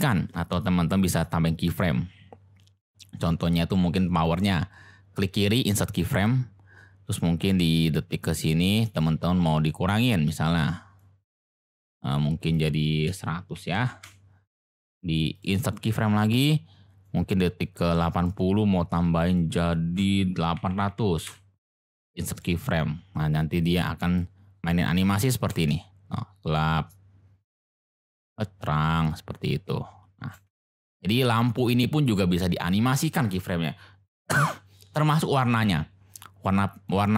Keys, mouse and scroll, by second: 4.3-6.0 drag, 7.4-8.8 drag, 10.0 click, 12.5-15.0 drag, 13.8 0, 15.3 click, 17.0-18.2 drag, 19.3-22.2 drag, 20.9 0, 22.2 middle click, 23.7 click, 25.5 space, 30.3 space, 32.6 click, 36.9 click.